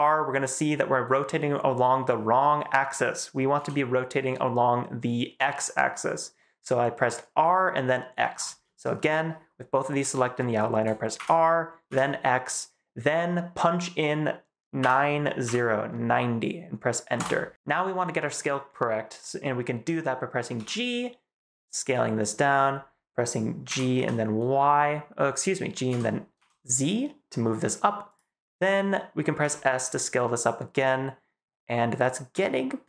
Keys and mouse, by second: 3.4 x, 8.2 Escape, 11.0 r, 11.8 x, 14.7 9, 15.3 0, 17.1 Return, 20.4 s, 22.1 click, 23.6 g, 23.8 y, 25.8 x, 26.2 z, 29.3 s.